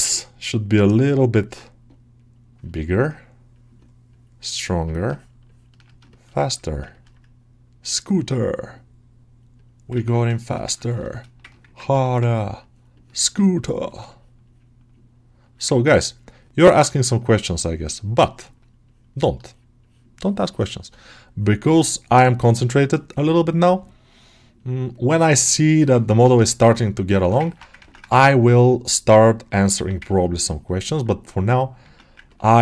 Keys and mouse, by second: 2.6 ctrl+alt+middle click, 3.4-5.0 right drag, 5.0 ctrl+alt+middle click, 5.3 ctrl+middle click, 6.0 alt+shift+middle click, 6.3-10.0 ctrl+alt+middle drag, 10.3 shift+middle click, 10.7 ctrl+middle click, 11.0 shift+middle click, 11.4 ctrl+middle click, 12.2 ctrl+click, 12.8 ctrl+click, 13.1-15.7 ctrl+drag, 16.0-17.2 ctrl+drag, 18.4-26.0 ctrl+drag, 26.0 ctrl+alt+middle click, 26.4 middle click, 27.6 ctrl+Tab, 27.9 shift+a, 30.0 Tab, 30.2 alt+middle click, 31.7 ctrl+Tab, 32.2 ctrl+middle click, 32.4 middle click.